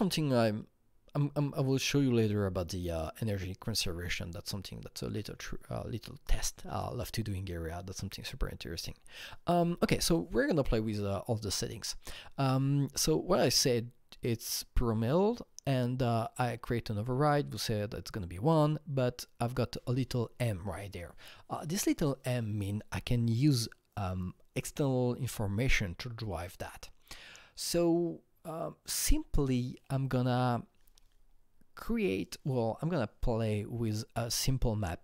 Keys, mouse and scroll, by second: 4.6 click, 4.6-5.7 scroll up 6, 5.8 scroll down 2, 31.7 click, 31.7-32.4 scroll down 1.